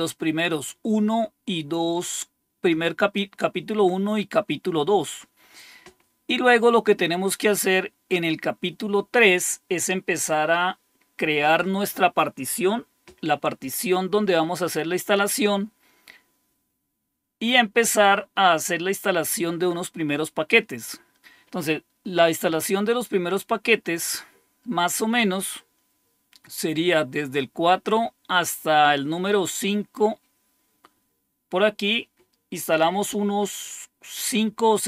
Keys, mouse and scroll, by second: 5.6-6.8 scroll down 1, 24.4-25.5 scroll down 1, 25.6-26.4 scroll up 1.